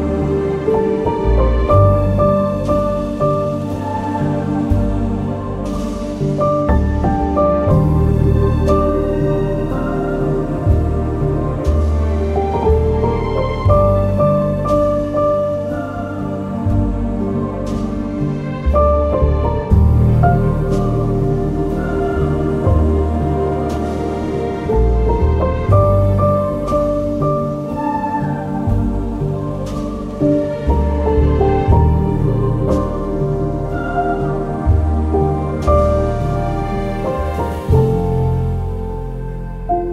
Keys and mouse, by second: 1.2 2, 1.7 alt+click, 3.1 alt+z, 6.4 alt+shift+click, 9.8 alt+z, 11.8 e, 12.0 y, 13.0 click, 14.4 ctrl+KP_Add, 14.5 ctrl+KP_Add, 14.6 ctrl+KP_Add, 14.7 ctrl+KP_Add, 14.9 ctrl+KP_Add, 15.6 s, 16.0 y, 18.0 click, 18.6 g, 18.8 y, 19.7 click, 20.5 alt+h, 21.9 Tab, 22.3 z, 27.6-28.1 middle drag, 29.6 ctrl+KP_1, 30.6 Tab, 31.9 2, 32.8 1, 33.2 alt+z, 34.0 alt+z, 35.1 alt+z, 36.8 g, 38.7 click, 39.5 g.